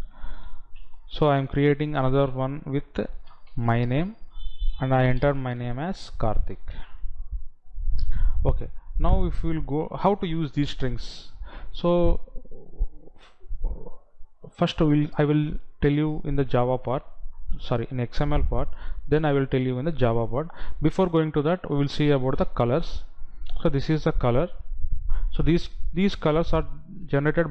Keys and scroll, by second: 3.0 Right.